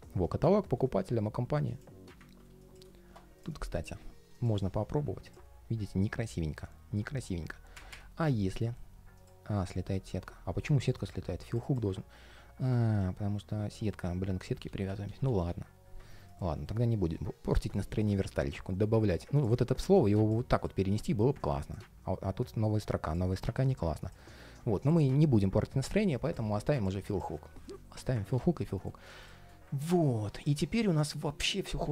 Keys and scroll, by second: 9.5 ctrl+shift+4, 13.8 super+z, 16.3 ctrl+shift+4, 23.3 super+z, 24.9 super+z.